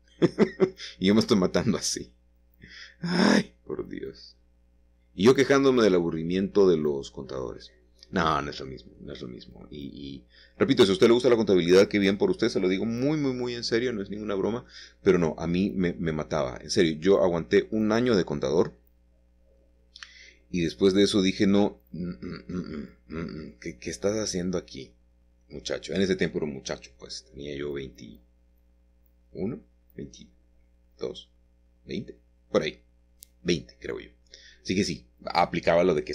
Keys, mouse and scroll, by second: 0.1 Escape, 2.1 typing, 3.3 typing, 4.7 v, 6.0 c, 6.3-8.6 middle drag, 6.8 Escape, 11.2 c, 11.5 middle click, 12.1 Escape, 19.6 c, 20.4 Escape, 21.8 click, 22.9-24.2 scroll down 2, 24.8-26.0 middle drag, 26.1 c, 26.5-27.7 middle drag, 27.9 Escape, 28.7-30.2 shift+middle drag, 30.8 c, 31.4-33.6 middle drag, 35.5 Escape.